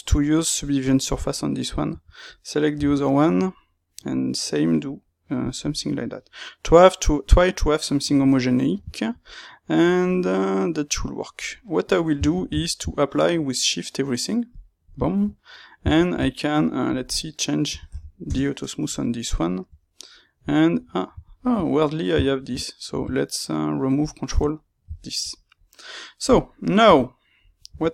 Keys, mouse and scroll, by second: 1.1 middle click, 5.2-14.5 middle drag, 14.5 shift+q, 14.9-18.1 shift+middle drag, 18.1 shift+q, 18.2 KP_Enter, 18.9 middle click, 19.7 Tab, 20.1-21.7 middle drag, 20.8 Tab, 21.3 alt+click, 22.3 shift+q, 24.5 middle click, 26.7 KP_3.